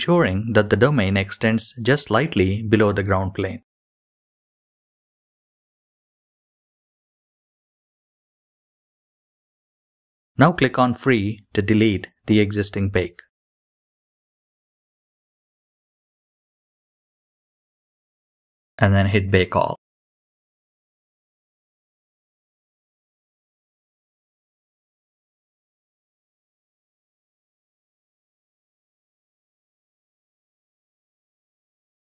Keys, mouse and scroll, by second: 6.0-6.5 scroll up 7, 6.3 g, 7.6 shift+middle click, 7.6 scroll up 2, 7.6 g, 8.6 middle click, 8.9-9.3 scroll down 9, 9.3 middle drag, 9.7 KP_1, 10.0 scroll up 1, 10.1 click, 10.1-10.6 scroll down 6, 11.2-25.9 drag, 11.2-12.4 scroll down 2, 25.9 shift+middle click, 26.1-32.1 drag.